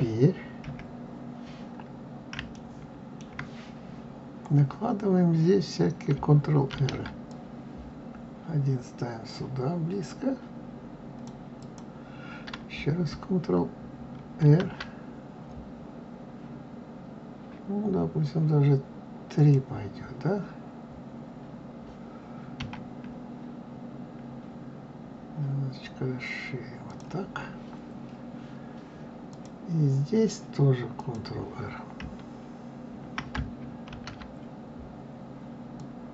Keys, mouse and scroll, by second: 0.5 KP_1, 2.4-5.5 shift+middle drag, 6.6 ctrl+r, 14.4 ctrl+r, 29.2 click, 30.9 click, 33.8 ctrl+r.